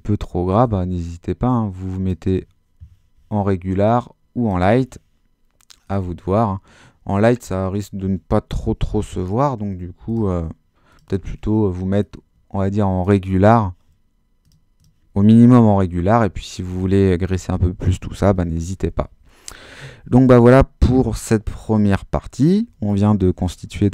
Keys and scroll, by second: 15.9 super+-.